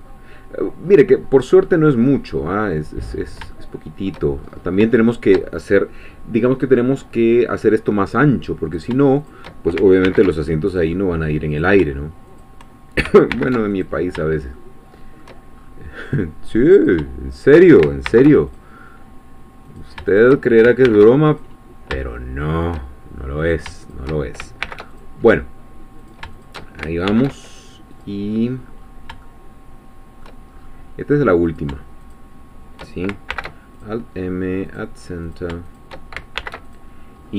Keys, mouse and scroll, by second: 0.1-1.3 scroll down 1, 1.7-2.9 middle drag, 3.0-3.4 scroll up 1, 3.5 shift+middle click, 4.4-4.8 shift+scroll up 4, 5.0 shift+middle click, 8.7 click, 9.3 shift+click, 10.0 alt+m, 10.7-11.8 alt+drag, 12.4 shift+click, 13.3 alt+m, 13.7 alt+click, 14.5-15.6 shift+middle drag, 15.6-16.0 shift+scroll up 1, 16.9 shift+click, 18.1 alt+m, 18.5 alt+click, 19.8 click, 20.1 shift+click, 20.9 alt+m, 21.3 alt+click, 22.1-23.2 shift+middle drag, 23.5 shift+click, 24.6 alt+m, 24.9 alt+click, 26.2 shift+click, 27.1 alt+m, 27.9 click, 28.3-28.9 scroll down 2, 28.9 scroll down 1, 29.2-30.4 shift+drag, 30.5-31.5 shift+scroll up 3, 31.5 shift+click, 32.1 shift+click, 33.3 alt+m, 34.7 click, 35.3 click, 35.7 shift+click, 36.4 alt+shift+m, 36.6 alt+click, 37.2-37.3 scroll down 2.